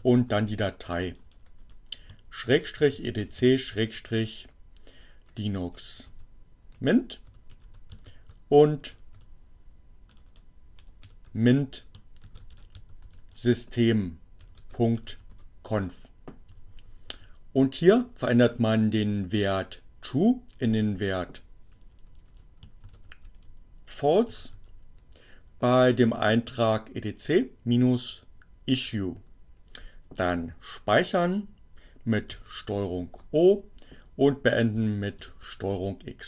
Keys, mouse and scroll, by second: 0.0-1.2 typing, 2.8-9.1 typing, 10.6-15.5 typing, 16.1 Down, 17.3 Right, 18.8 Right, 20.4 Left, 21.2 Delete, 22.6-24.7 typing, 31.4 ctrl+o, 33.2 ctrl+Return, 34.1 ctrl+x.